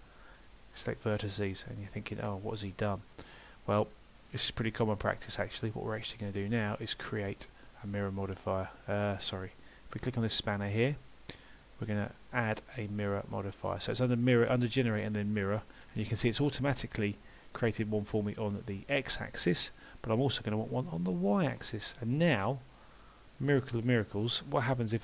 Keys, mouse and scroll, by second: 2.1 middle click, 7.7 click, 16.5 middle click, 20.9 click, 21.6 middle click, 24.9 click.